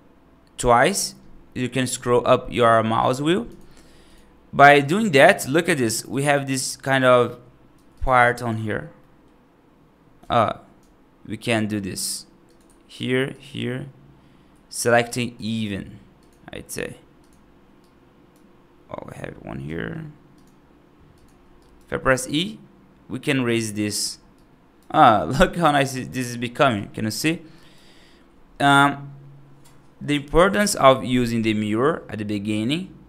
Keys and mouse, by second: 4.7 right click, 5.9 right click, 6.5 right click, 7.6 3, 8.2 right click, 8.9 middle click, 13.2 ctrl+click, 16.0 shift+click, 17.1 shift+click, 17.7 right click, 21.1 shift+click, 21.4 right click, 22.0 e, 23.6 right click, 24.2 right click, 24.9 right click, 25.4 right click, 26.2 right click, 27.0 right click, 27.4 right click.